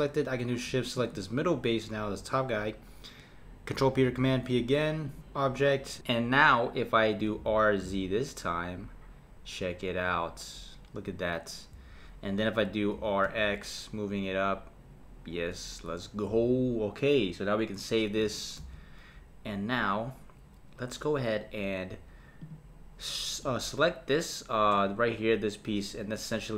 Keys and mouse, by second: 1.0 shift+click, 3.9 p, 7.4 r, 12.9 r, 18.6 s, 22.4 click.